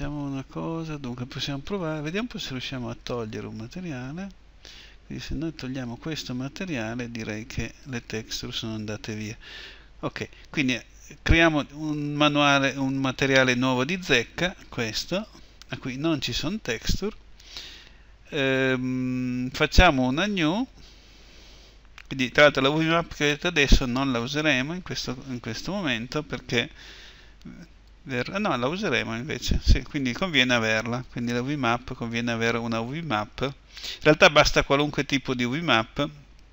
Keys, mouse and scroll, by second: 8.0-20.7 drag, 22.0-36.5 drag.